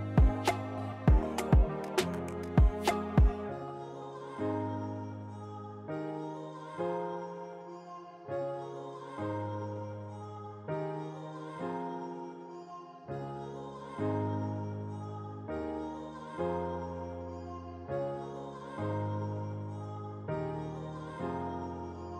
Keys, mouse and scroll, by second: 1.1 click, 1.1 typing, 5.7 click, 8.3 click, 10.8 click, 15.6 typing, 18.9 typing, 20.2 typing, 22.1 d.